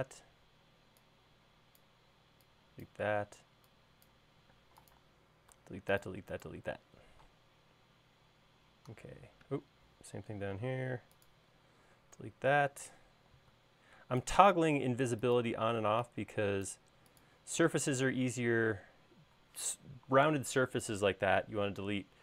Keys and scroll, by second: 1.4 e, 5.3 space, 12.9 BackSpace, 15.5 BackSpace, 16.1 BackSpace, 16.5 e, 18.8 space.